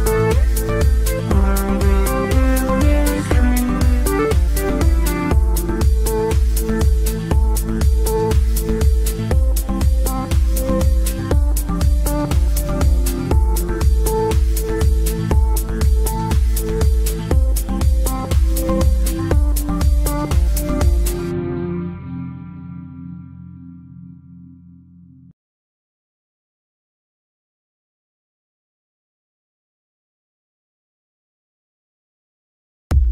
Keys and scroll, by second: 9.4 Delete, 12.4 g, 20.2 F3, 28.3 shift+F2, 29.5 F9.